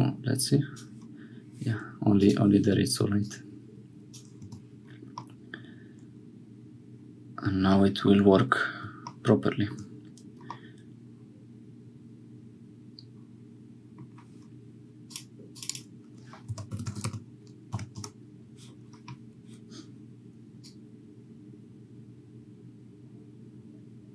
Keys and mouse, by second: 2.1 click, 3.2 click, 4.4 Tab, 5.2-8.0 drag, 10.5-13.9 middle drag, 15.0 click, 15.5 click, 20.6-24.1 drag.